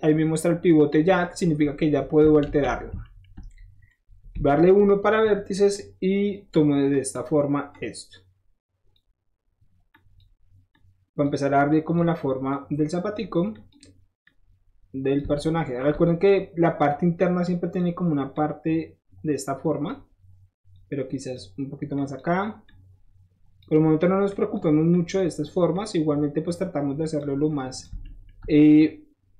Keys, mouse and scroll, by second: 1.2 click, 2.4 ctrl+z, 4.3 1, 4.8 click, 5.7 click, 6.3 typing, 6.9 click, 7.7-8.9 drag, 9.9 click, 10.7 click, 11.6 drag, 12.4-13.1 drag, 13.5 click, 14.2 click, 15.3 shift+middle click, 17.4 shift+click, 18.3-19.8 drag, 20.7-21.3 drag, 21.9 drag, 22.6-23.6 drag, 24.3 drag, 24.9 drag, 25.7-27.2 drag, 27.5 drag, 28.0 shift+middle drag, 28.8 shift+click.